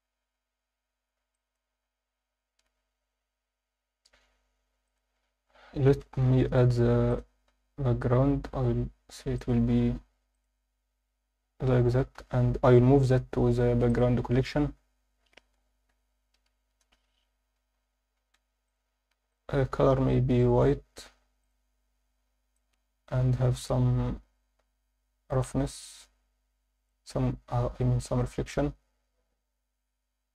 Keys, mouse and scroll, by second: 1.2 scroll down 1, 1.3 alt+shift+middle drag, 2.9 scroll down 1, 3.8-4.4 scroll down 1, 4.9-5.5 drag, 5.9 shift+c, 6.3 shift+a, 7.6-8.5 scroll down 2, 8.5 s, 9.4 click, 9.8 s, 10.3 click, 10.7-11.1 scroll down 1, 12.2 m, 19.3 click, 21.4 click, 25.7-26.9 drag, 25.7-26.9 scroll down 3.